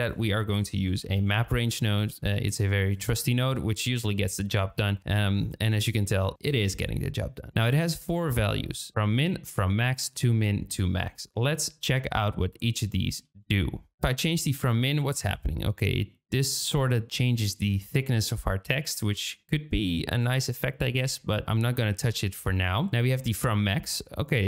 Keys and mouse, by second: 5.1 middle click, 5.2 drag, 5.3-6.5 middle drag, 14.5-22.0 shift+middle drag, 22.9-24.4 shift+middle drag.